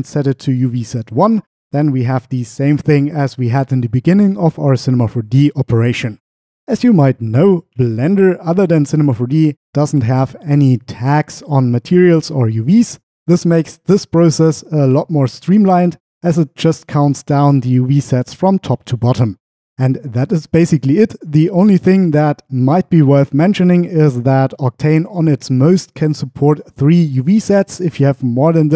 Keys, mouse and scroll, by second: 6.9-8.5 drag.